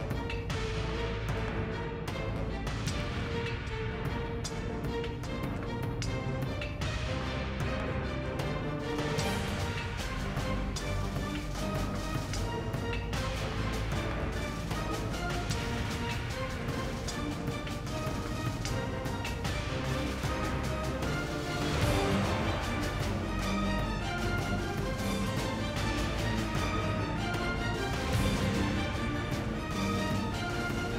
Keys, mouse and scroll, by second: 5.2 Tab, 6.4 KP_1, 8.0 g, 10.8 right click, 14.6 right click, 14.6 KP_7, 15.1 g, 16.6 right click, 18.4 z, 18.6 Tab, 20.2 Tab, 20.7 Tab, 20.9 Tab, 21.2 Tab, 22.0 KP_7, 22.3 Tab, 25.4 Tab, 25.9 Tab, 26.6 right click.